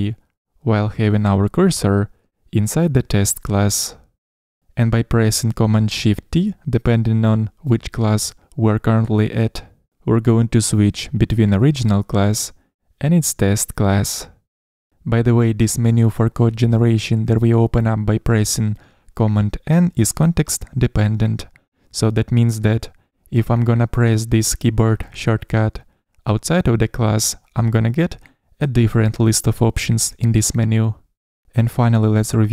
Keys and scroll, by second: 7.6 shift+super+t, 13.2 shift+super+t, 18.5 super+1, 26.1 super+n.